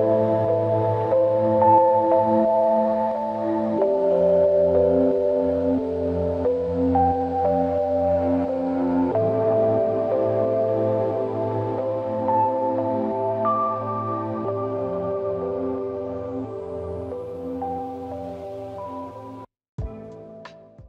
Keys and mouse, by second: 1.8 double click, 4.0 shift+click, 6.2 double click, 11.1-12.4 typing, 13.8 double click.